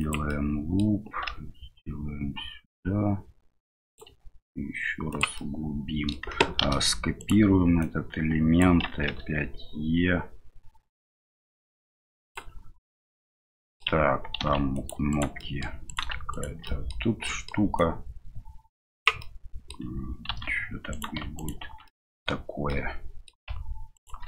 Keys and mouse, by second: 0.4 middle click, 5.5 middle click, 7.9 click, 9.1 e, 13.1 middle click, 15.5 middle click, 15.8 right click, 16.3 shift+right click, 16.6 middle click, 17.7-19.0 drag, 19.3 middle click, 20.3 ctrl+r, 21.3 right click, 21.8 middle click, 22.6 click, 23.9 alt+shift+right click.